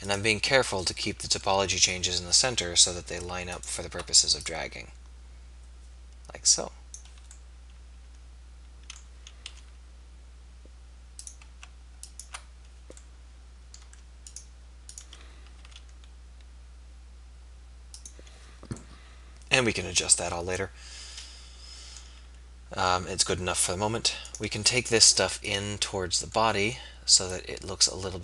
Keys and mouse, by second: 2.4 KP_3, 9.5 s, 13.2 middle click, 15.7 s, 18.0 click, 19.1-20.3 middle drag.